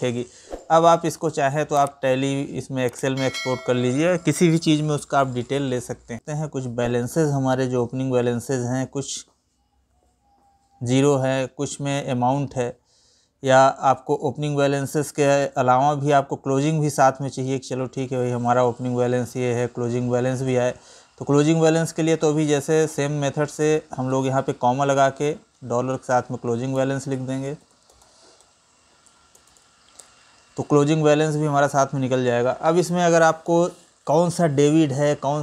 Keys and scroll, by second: 6.2 Down, 10.6 Down, 13.3 ctrl+n, 14.3 Up, 15.1 Right, 20.1 Right, 22.0 Right.